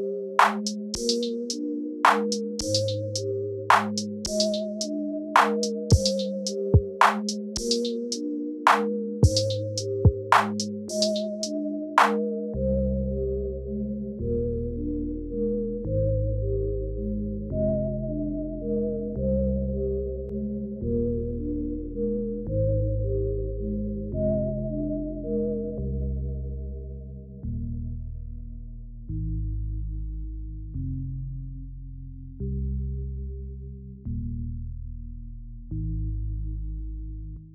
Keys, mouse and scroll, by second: 0.1 click, 2.0 g, 8.7 space, 10.6 click, 11.8 click, 14.3 click, 18.4 x, 20.2 space, 22.7 space, 23.7 click, 26.2 n, 26.5 click, 28.9 click, 28.9 n, 32.2 click, 35.7 space, 35.9 space, 36.8 space.